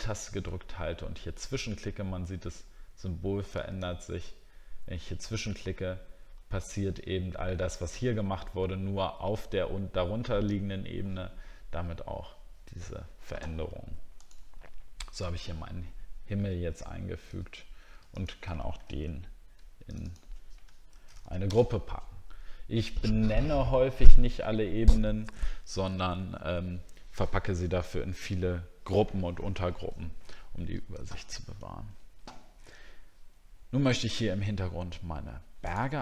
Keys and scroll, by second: 14.6 alt+scroll down 1, 19.0 ctrl+g, 20.9 shift+s.